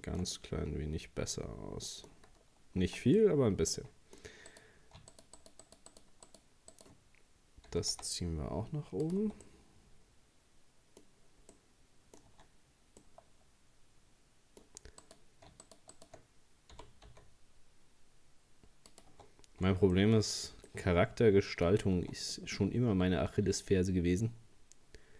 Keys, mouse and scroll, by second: 2.3-2.6 scroll up 2, 2.9 Tab, 3.2-4.5 middle drag, 4.5 right click, 5.1 shift+right click, 5.4 shift+right click, 5.6 shift+right click, 5.9 shift+right click, 6.3 shift+right click, 6.8 shift+right click, 7.7 g, 9.2 Tab, 9.5-12.3 middle drag, 12.3 Tab, 13.0-15.0 middle drag, 15.0 right click, 15.6 shift+right click, 15.9 shift+right click, 16.8 g, 19.1 Tab, 20.0 shift+middle click, 20.2 shift+scroll down 2, 20.7-21.7 middle drag, 21.7 scroll up 1, 22.0 Tab, 23.7 ctrl+r.